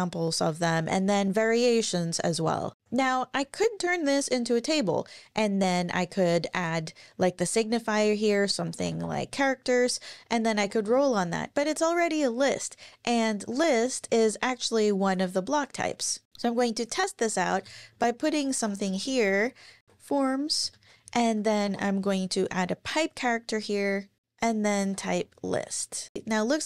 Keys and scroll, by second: 7.9-9.4 typing, 10.6 shift+super+Left, 10.8 BackSpace, 13.4 super+`, 15.7 super+`, 17.5 Return, 17.6 Return, 17.9-20.3 typing, 20.6 Return, 21.6 shift+\, 24.5-25.4 typing, 25.4 Up.